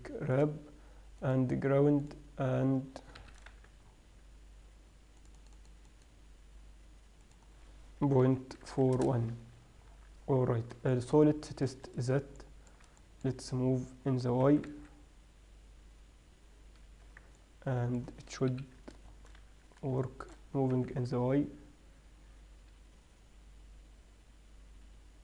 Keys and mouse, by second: 0.2 right click, 1.5-3.2 middle drag, 3.2 right click, 3.4 KP_3, 3.8 z, 5.6-6.7 middle drag, 10.2 z, 14.8 g, 17.6-21.4 drag, 18.8 KP_3, 19.7 z, 21.1 g.